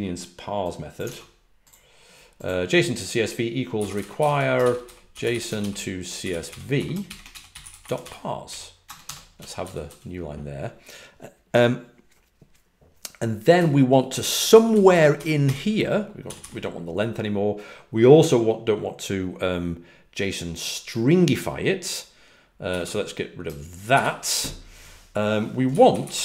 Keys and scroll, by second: 1.0 super+Tab, 3.6-9.8 typing, 13.5 typing, 16.2 typing, 22.6 typing, 26.1 typing.